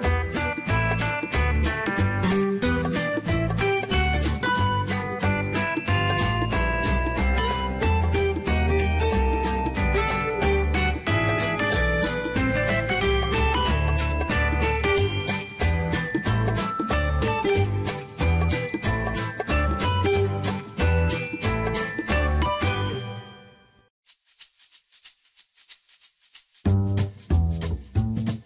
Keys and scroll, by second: 2.1-3.5 typing, 5.6-6.8 typing, 10.9 Escape, 13.4 Escape, 16.2 0, 16.9 ., 17.2 5, 17.7 Return, 20.6-22.1 typing.